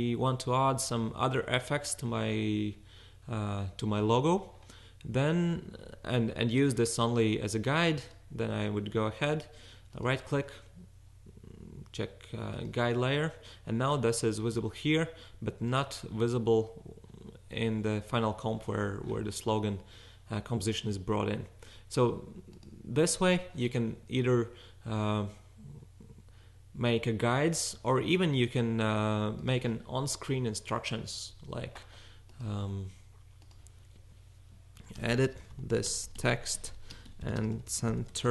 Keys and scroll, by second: 34.5-38.3 typing.